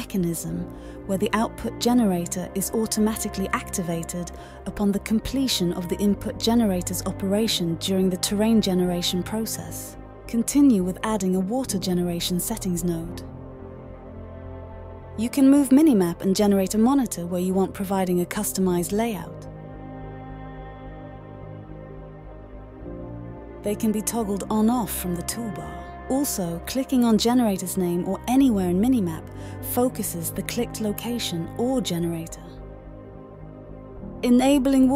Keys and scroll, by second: 5.0-6.0 typing.